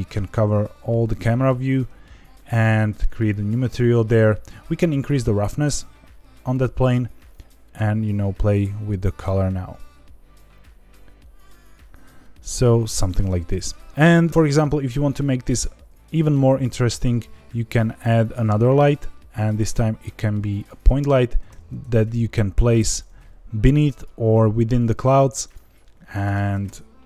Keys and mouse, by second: 1.1 Tab, 2.7 click, 4.6 click, 15.8 shift+a, 21.4 g, 21.8 shift+z, 22.8 click, 23.0 g, 23.1 z, 23.9 click, 25.5-27.0 drag, 26.4 KP_0.